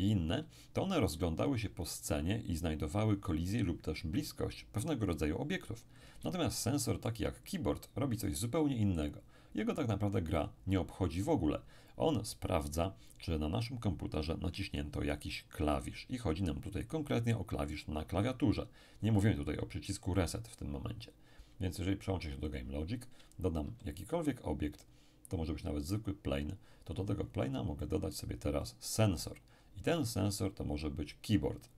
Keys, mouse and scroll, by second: 6.6-8.0 shift+middle drag, 8.5 click, 9.9 click, 21.0 click, 22.5 click, 23.6 shift+a, 26.0 click, 27.2-27.8 scroll up 1, 27.8-29.7 middle drag, 28.6 click.